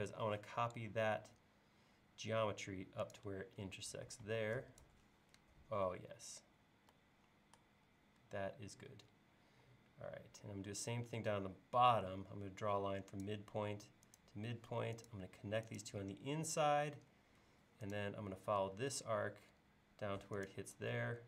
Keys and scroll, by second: 4.2 e, 9.5 l, 16.8 l, 20.9 e.